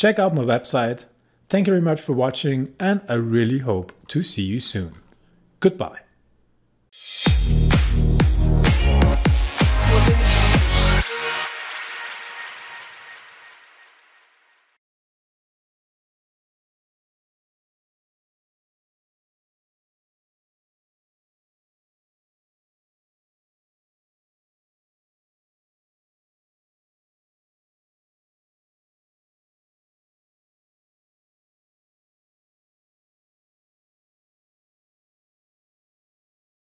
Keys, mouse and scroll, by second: 0.6-2.3 scroll down 1, 4.1-4.5 scroll up 1.